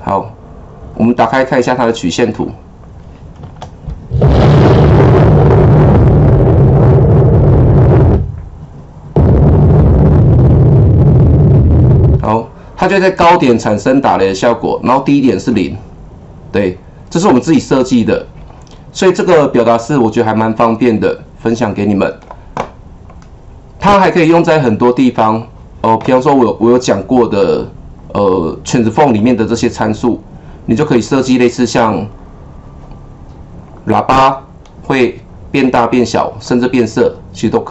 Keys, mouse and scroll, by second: 2.4 click, 3.4 KP_0, 11.9-17.9 drag, 19.3-27.4 drag, 28.0-29.0 scroll down 1, 29.0-30.5 scroll down 1, 30.9 scroll down 1, 31.0 click, 33.6-37.7 drag.